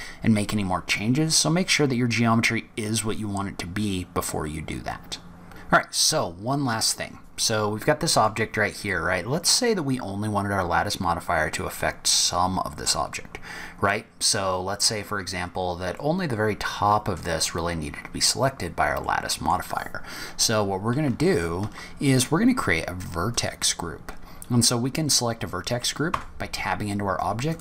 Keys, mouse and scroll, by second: 5.0-5.4 scroll down 2, 5.4 click, 5.6 scroll down 1, 5.9-6.4 scroll up 4, 7.0-7.8 scroll down 3, 7.3-7.8 scroll up 1, 7.8 middle click, 15.4 scroll up 4, 15.9 middle click, 19.0 middle click, 19.6-20.1 scroll down 5, 23.3 click, 26.0 Tab, 27.4 click.